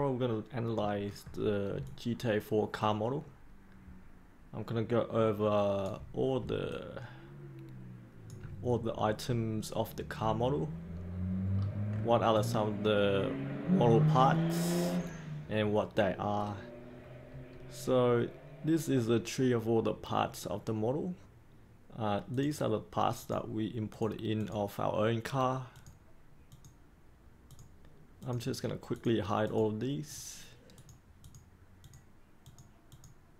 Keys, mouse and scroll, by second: 1.8-5.8 alt+drag, 6.7-8.2 alt+drag, 10.7 scroll up 1, 11.0-12.3 scroll down 1, 12.3-14.8 drag, 16.3-22.3 scroll up 1, 22.3-33.3 drag.